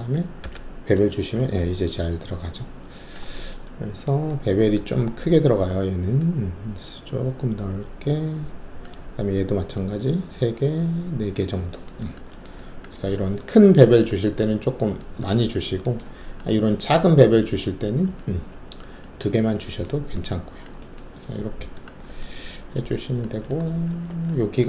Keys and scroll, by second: 0.4 shift+b, 23.8 alt+shift+2.